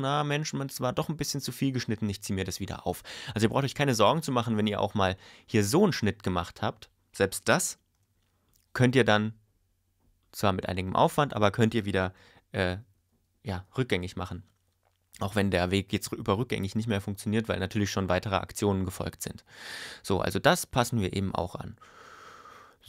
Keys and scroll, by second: 12.7 super+y.